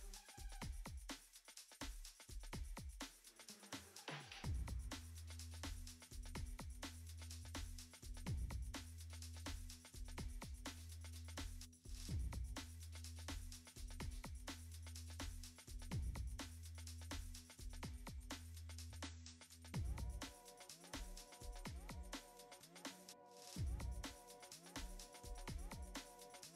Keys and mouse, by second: 5.6 middle click, 6.6 alt+z, 6.6 drag, 7.1 middle click, 9.6 click, 11.8 n, 12.3 F6, 12.6 u, 15.4 F6, 15.4 click, 15.4 n, 15.7 ctrl+r, 16.6 ctrl+t, 17.4 click, 18.4 click, 19.0 middle click, 19.6 click, 20.5 click, 21.2 middle click, 22.4 click, 23.1 click, 23.5 click, 23.9 click, 24.4 click, 25.9 ctrl+Tab, 26.4 middle click.